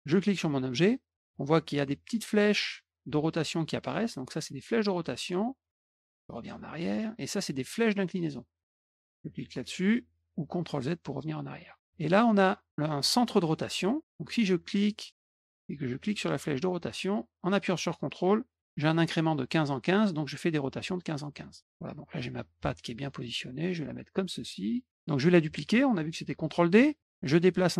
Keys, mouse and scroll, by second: 0.0 click, 4.4-5.2 drag, 6.5 click, 7.8-8.8 drag, 10.6 click, 14.6-21.3 drag, 23.2-24.9 drag, 26.7 ctrl+d, 27.0-27.7 drag.